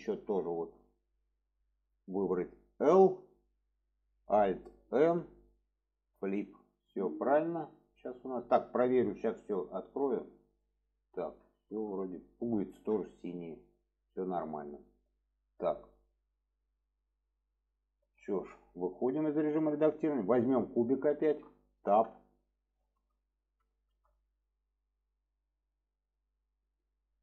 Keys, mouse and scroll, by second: 0.4 shift+middle drag, 1.8 click, 4.4 alt+l, 5.0 alt+n, 9.6 click, 10.1 click, 10.6-10.9 middle drag, 11.5 shift+middle drag, 12.2 middle drag, 13.1 shift+middle click, 16.5 click, 17.0 click, 17.5-18.3 middle drag, 19.5 Tab, 20.1-21.0 drag, 21.1 shift+middle click, 22.9 shift+middle click, 23.7 shift+middle click.